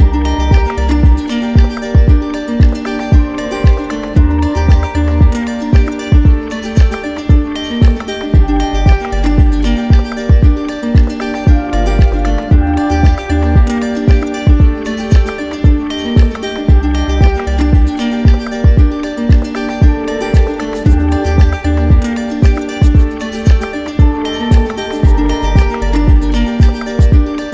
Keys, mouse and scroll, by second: 0.1 right click, 1.0 right click, 2.3 click, 3.8 shift+click, 4.6 click, 6.1 shift+click, 7.4 shift+click, 8.8 shift+click, 11.4 shift+click, 13.2 right click, 14.5 alt+right click, 14.9 z, 16.6 right click, 17.5 right click, 18.1 right click, 19.0 click, 19.8 middle click, 20.5 right click, 22.3-23.4 drag, 24.4-25.5 drag, 26.3 click.